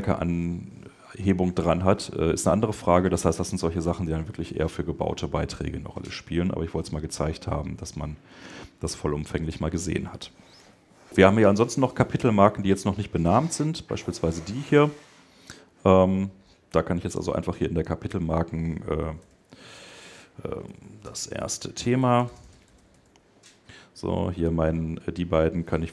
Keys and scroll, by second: 10.4 ⟲, 19.6 shift+BackSpace, 20.2 shift+BackSpace.